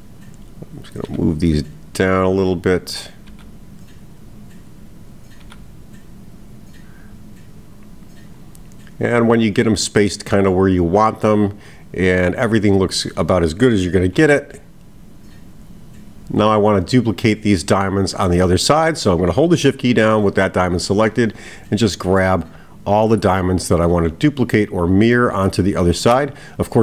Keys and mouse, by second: 0.9 click, 3.1 click, 5.2 click, 11.9 click, 12.9 click, 22.1 shift+click, 24.4 shift+click, 25.8 shift+click.